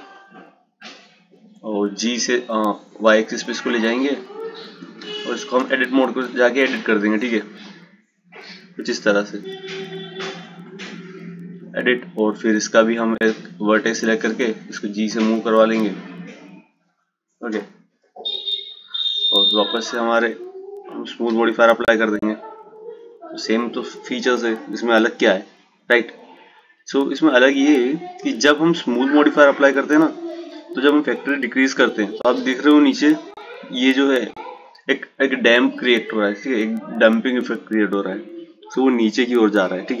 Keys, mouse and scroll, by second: 1.2 g, 5.2 Tab, 6.2-9.2 right drag, 9.2-12.2 drag, 12.4 click, 13.5 g, 18.8 Tab, 21.8-23.3 drag, 24.6-27.6 drag, 35.5-38.7 drag, 38.7-40.0 drag.